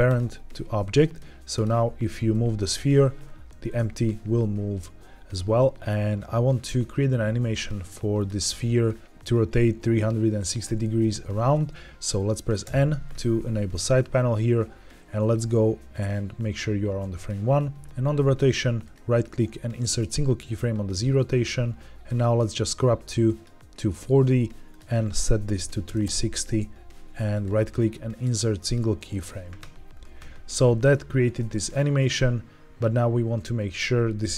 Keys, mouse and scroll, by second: 1.0 click, 1.4 click, 2.2 r, 2.2 z, 4.2 Escape, 7.7 click, 8.1 click, 12.5 n, 18.7-19.9 right drag, 22.1-23.3 drag, 24.6-26.0 drag, 27.2-28.6 right drag, 30.7-32.7 drag.